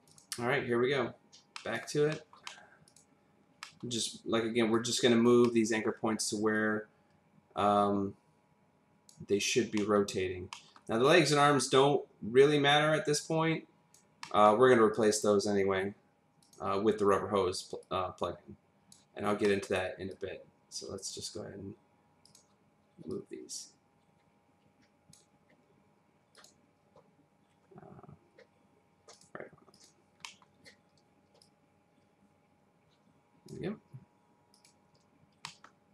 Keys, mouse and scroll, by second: 0.0 click, 1.6 middle click, 2.2 middle click, 2.4 double middle click, 2.8 click, 3.6 middle click, 4.8 click, 5.4 middle click, 6.5 click, 9.5 click, 9.8 middle click, 10.1-10.5 scroll down 1, 10.5 middle click, 11.5 click, 14.2 middle click, 14.9 click, 16.4 click, 17.9 click, 19.1 scroll up 1, 19.4 middle click, 20.1 click, 22.2 click, 26.3 click, 29.1 click, 30.2 click, 30.2 middle click, 30.7-31.0 scroll down 1, 31.4 click, 34.5 click, 35.4 middle click.